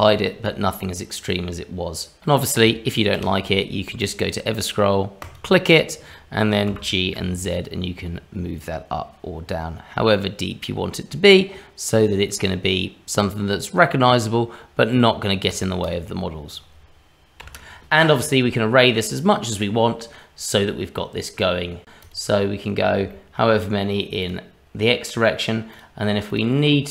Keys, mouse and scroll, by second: 0.2 middle click, 2.9 click, 3.1 q, 6.7 g, 15.8 click, 16.5 click, 17.4 h, 17.7 scroll down 1, 18.0 middle click, 19.0-19.6 scroll up 2, 19.6 middle click, 21.9 click, 22.0 click, 22.4-23.0 scroll down 2, 23.1 shift+middle click, 24.2 click, 25.7 click.